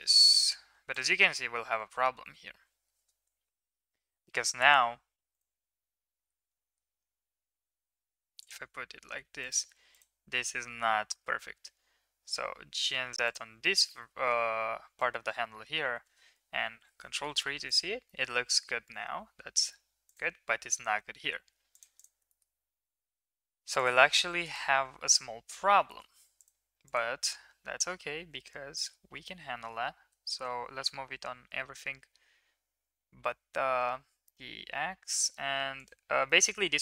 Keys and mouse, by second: 0.1 shift+middle drag, 0.9 click, 3.7 ctrl+KP_3, 5.8 g, 9.3 click, 11.1 g, 13.8-15.0 middle drag, 16.7 ctrl+KP_3, 17.6 middle drag, 18.0 middle drag, 20.7 g, 22.2 middle click, 24.4 click, 25.9 shift+middle click, 26.9-28.1 drag, 28.1 g, 36.4-36.8 middle drag.